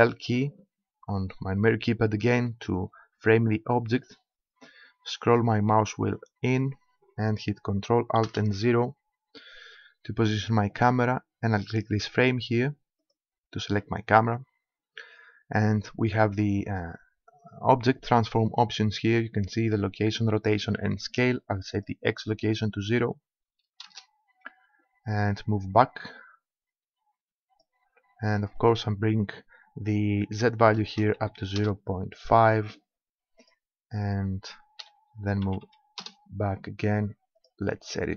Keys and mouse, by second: 4.1-8.3 middle drag, 8.3 ctrl+alt+KP_0, 11.9-14.7 middle drag, 21.7-23.5 drag, 25.3-26.9 drag, 28.6-30.3 drag, 33.4-35.1 drag, 37.4-38.1 drag.